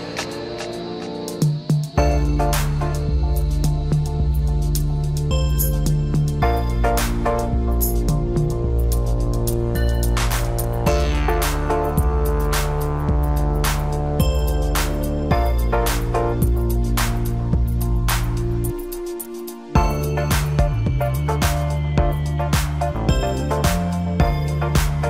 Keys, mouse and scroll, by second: 0.2 click, 0.2-0.9 scroll up 3, 0.9-3.2 middle drag, 6.5-7.6 middle drag, 7.6 e, 10.7 click, 11.3-12.5 middle drag, 12.5 click, 13.0 click, 14.2 KP_3, 16.0 click, 17.2-19.9 drag, 20.0-21.3 scroll up 1, 24.0-25.0 middle drag.